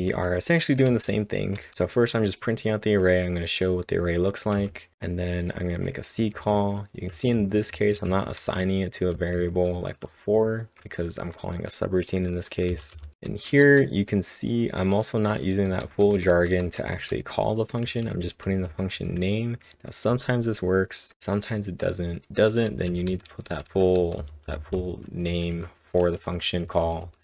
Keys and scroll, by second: 0.6-2.2 typing, 4.5 typing, 7.4-14.4 typing, 15.7-18.9 typing, 25.3-27.2 typing.